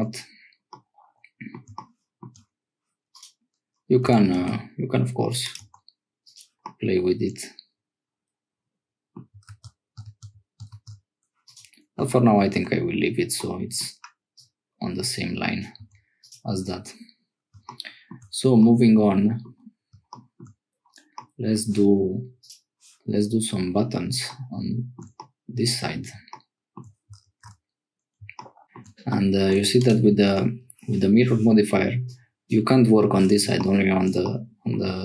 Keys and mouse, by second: 0.7 middle click, 3.1 click, 4.0 g, 5.6 Tab, 6.6-8.6 middle drag, 8.6 click, 9.6 ctrl+z, 10.1 ctrl+z, 10.8 ctrl+z, 12.0 Tab, 12.5 Tab, 13.4 click, 14.4-15.6 drag, 15.8 Tab, 16.2 click, 18.6 click, 21.1 middle click, 25.1 middle click, 27.2 ctrl+s, 28.6 shift+middle click, 29.1 middle click, 30.3 Tab, 32.1 click, 33.8 shift+click, 34.2 click.